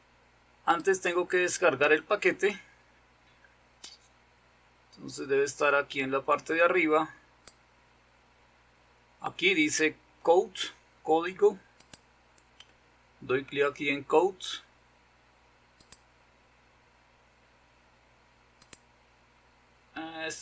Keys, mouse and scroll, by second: 1.5-7.9 drag, 12.0 click, 15.9 click, 18.9 click.